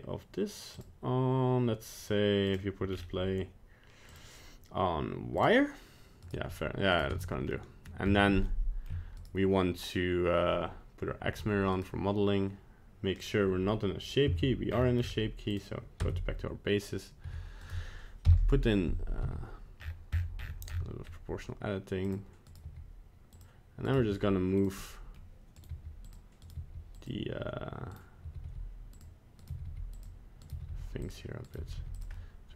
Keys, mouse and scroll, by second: 0.7 click, 2.4 click, 2.9-4.1 scroll down 5, 4.1 click, 6.2 right click, 6.9 right click, 7.1 Tab, 7.5 middle click, 8.0 scroll up 1, 8.4 shift+middle click, 9.1 right click, 11.3 g, 13.2 click, 14.3 Tab, 14.7-15.0 scroll up 10, 15.0 scroll down 1, 15.1 scroll up 1, 15.5 click, 16.0 Tab, 17.2 g, 18.2 o, 19.2 g, 22.5 right click, 22.7 g, 23.8 right click, 24.0 g, 24.8 middle click, 25.5 right click, 25.7 g, 26.4 right click, 26.6 g, 27.9 right click, 28.2 g, 29.4 right click, 29.5 g, 30.4 right click, 30.5 g, 31.4 right click, 31.6 g, 32.1 middle click.